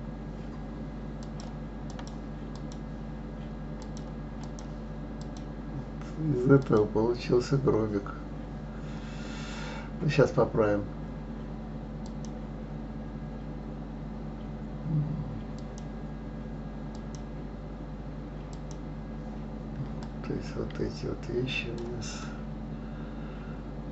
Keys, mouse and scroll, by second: 1.2 click, 1.9-5.3 drag, 6.6 click, 12.0 click, 16.9-19.9 drag, 20.0-22.2 drag, 22.2-23.9 middle drag.